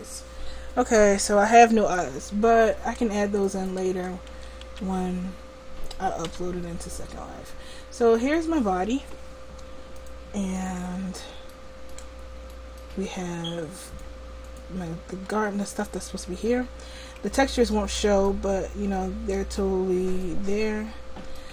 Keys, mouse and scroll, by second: 0.0-1.6 drag, 3.1 Tab, 3.8 Tab, 4.4 a, 4.7 a, 6.3 a, 10.7 click, 11.5-12.9 middle drag, 13.9-17.6 drag.